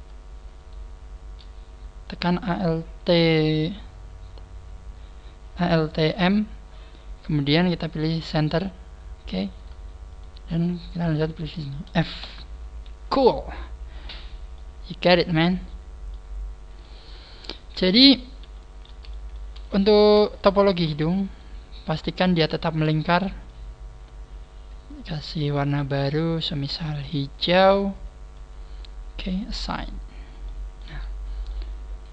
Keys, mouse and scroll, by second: 0.6 shift+right click, 9.6 right click, 10.1 shift+right click, 10.6 shift+right click, 11.1 shift+right click, 12.2 f, 12.6 scroll down 3, 12.8 a, 13.1 middle click, 14.5 middle click, 16.4 scroll up 2, 16.8 middle click, 18.4 a, 18.9 a, 19.0 middle click, 19.6 alt+shift+right click, 20.3 alt+shift+right click, 21.3 alt+shift+right click, 21.7 alt+shift+right click, 22.1 alt+shift+right click, 23.0 middle click, 25.2 click, 29.4 click, 30.2 scroll down 1, 30.4 middle click, 30.8 a, 31.0 scroll down 4, 31.4 middle click.